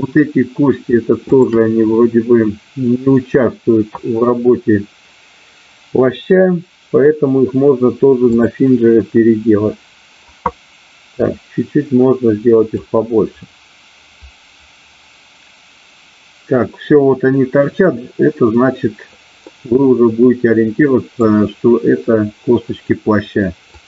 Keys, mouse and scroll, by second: 11.1-14.4 drag, 19.5-21.2 middle drag, 23.7 click.